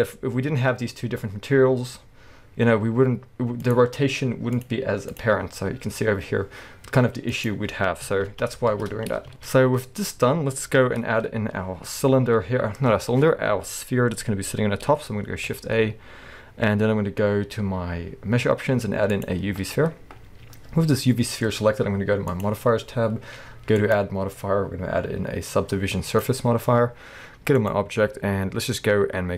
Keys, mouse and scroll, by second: 0.3-1.9 scroll up 2, 1.9 r, 3.7 right click, 4.6 click, 5.6 r, 7.5 right click, 8.4 ctrl+z, 9.1 scroll down 1, 9.3-22.3 shift+middle drag, 9.6-10.3 scroll up 1, 15.2 shift+a, 20.2-21.0 scroll down 1, 21.1-22.3 scroll up 1, 22.3 click, 23.8-29.3 drag.